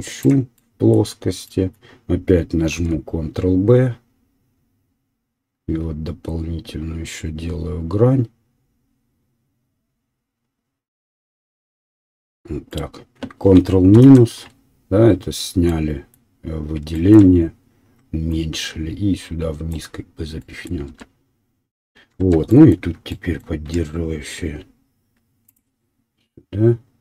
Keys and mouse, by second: 0.4 right click, 2.3 ctrl+b, 7.5-12.8 drag, 12.8-18.3 middle drag, 13.9 ctrl+KP_Subtract, 18.3-20.8 drag, 21.1 Tab, 22.3 Tab, 23.8 ctrl+r, 25.9-27.0 right drag.